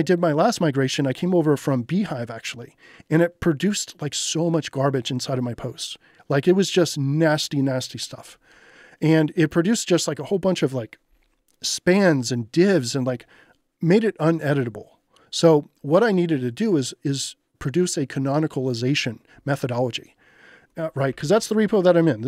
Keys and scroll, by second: 20.8-21.8 typing.